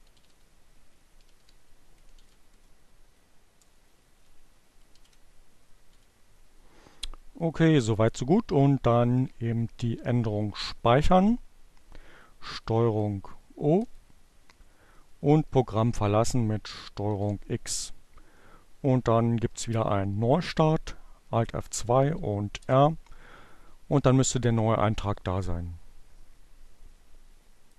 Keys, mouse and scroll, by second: 0.4 shift+Return, 1.4 space, 3.0 alt+0, 4.2 ,, 10.7 ctrl+o, 11.6 Return, 13.6 ctrl+x, 16.2 alt+F2, 18.3 r, 20.7 Return, 27.7 click.